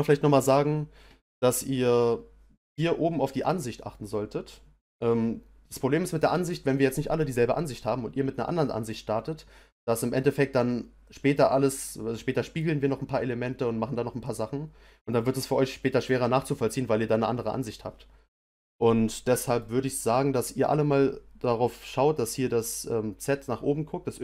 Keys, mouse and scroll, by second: 19.1 middle click, 20.0-21.2 scroll down 1, 21.2-22.3 scroll down 1, 22.3-23.0 scroll down 1.